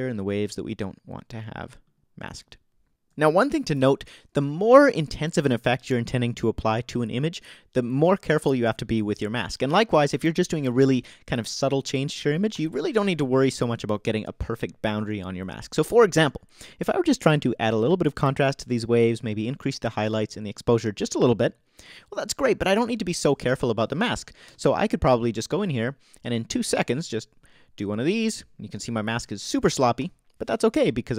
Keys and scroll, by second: 12.5 o, 24.5 BackSpace, 28.7 o, 30.0 ○.